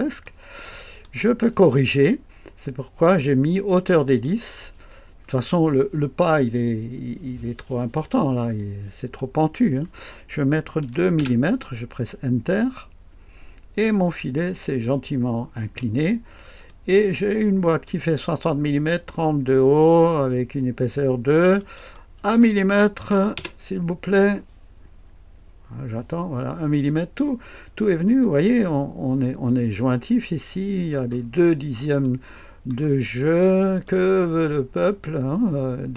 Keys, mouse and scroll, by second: 0.3-1.7 right drag, 4.1 click, 10.8 KP_2, 11.2 Return, 16.1-16.7 scroll down 1, 16.7-18.6 right drag, 21.6 click, 23.0 KP_1, 23.4 Return, 26.4-27.5 scroll up 1, 27.5-31.1 scroll up 1, 31.1-32.1 scroll down 2, 32.1-33.4 right drag, 33.1-33.9 scroll down 2, 33.9-35.9 drag.